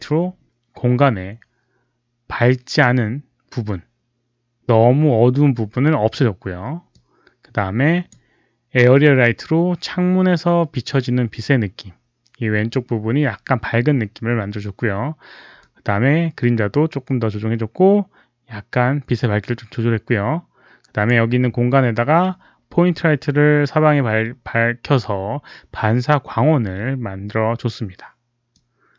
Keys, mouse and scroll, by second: 5.5 click, 6.8-8.0 drag, 15.5-21.0 drag, 28.4-28.9 drag.